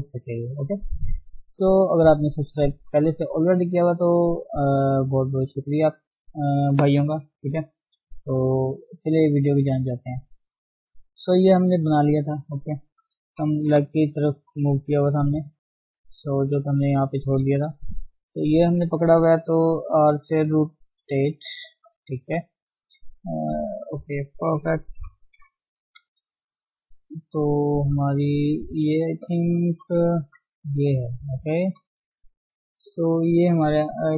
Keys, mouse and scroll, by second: 10.8-11.5 scroll up 3, 11.5-13.2 middle drag, 13.2 KP_1, 13.8-14.3 scroll down 2, 14.3 shift+middle click, 14.6-15.1 scroll up 1, 15.1 shift+z, 16.2 shift+click, 16.3 shift+z, 16.7-17.0 scroll up 1, 17.0 Tab, 17.5-19.7 shift+middle drag, 19.7-21.0 scroll down 1, 21.0 r, 23.0-25.0 middle drag, 25.0 KP_1, 25.7-26.6 scroll up 1, 26.6 shift+middle click, 27.0-28.2 scroll up 1, 28.2 shift+middle click, 29.0 click, 29.8 KP_3, 31.3 click, 33.4 KP_1.